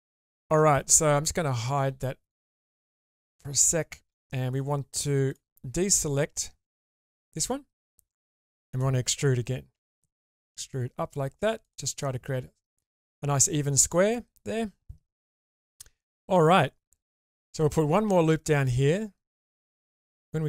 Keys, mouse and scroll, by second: 0.2 shift+middle click, 1.6 click, 3.2 middle click, 5.3 shift+click, 7.4 middle click, 8.4 shift+middle click, 9.8 e, 11.9 middle click, 14.1-17.3 middle drag, 18.0 ctrl+r.